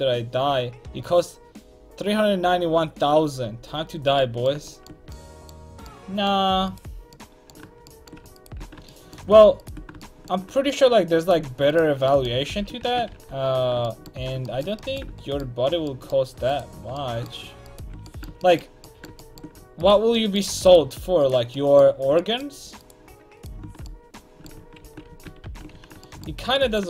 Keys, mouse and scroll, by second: 4.3 middle click, 12.5 ctrl+x, 12.8 a, 13.1 ctrl+t, 16.5-21.8 right drag, 18.1 click, 24.8 ctrl+x, 25.1 a, 25.4 ctrl+t, 25.7 a.